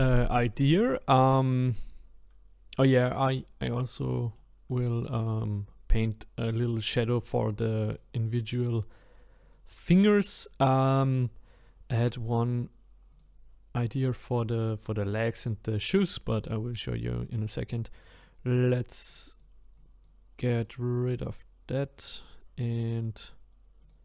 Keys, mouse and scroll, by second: 3.1-5.3 middle drag, 5.3-6.3 scroll up 2, 6.3-7.7 scroll up 1, 7.7-9.4 middle drag, 9.4 click, 10.0-10.6 scroll down 1, 10.6 shift+scroll down 1, 10.7-13.1 shift+middle drag, 13.1 click, 15.3 click, 23.8 click.